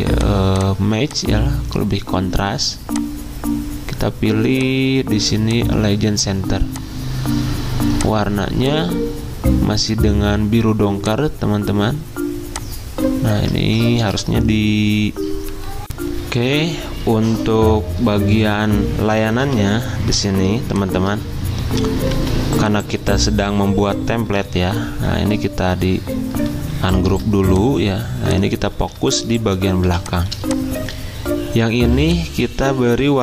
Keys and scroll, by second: 13.6 ctrl+z, 15.8 alt+Tab, 19.5 z, 22.1 v, 23.1 ctrl+z, 28.8 ctrl+shift+z.